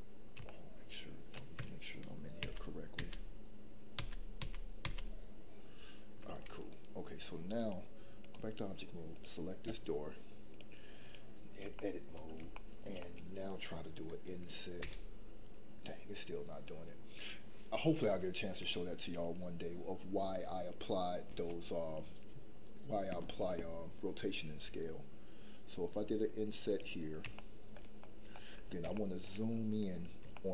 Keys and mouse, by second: 0.5 shift+middle click, 2.4 ctrl+z, 3.0 ctrl+z, 4.0 ctrl+z, 4.4 ctrl+z, 4.8 ctrl+z, 7.6 click, 10.5 click, 11.7 shift+middle click, 12.5 shift+middle click, 13.0 middle click, 14.8 i, 27.3 shift+middle click, 27.9 middle click, 28.9 shift+middle click, 30.3 shift+middle click.